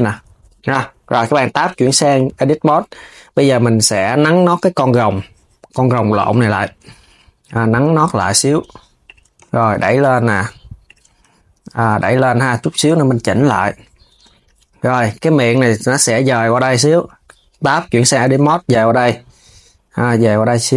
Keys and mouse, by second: 0.6 a, 7.3 s, 9.1 g, 14.6 click, 14.9 KP_1, 15.8 Tab.